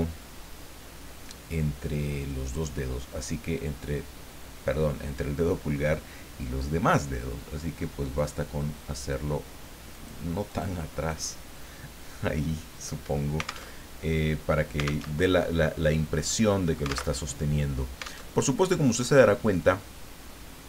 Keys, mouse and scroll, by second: 8.2 click, 9.9 click, 10.5 click, 11.1 click, 13.7 alt+Tab, 15.1 alt+Tab, 16.2 click, 17.2 alt+Tab, 18.3 alt+Tab, 19.1 click.